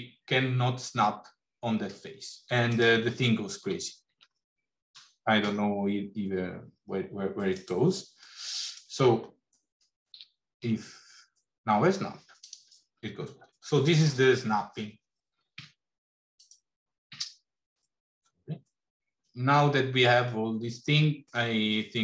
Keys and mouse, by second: 3.5 g, 8.1 middle click, 9.9 g, 15.7 Tab, 20.3 middle click.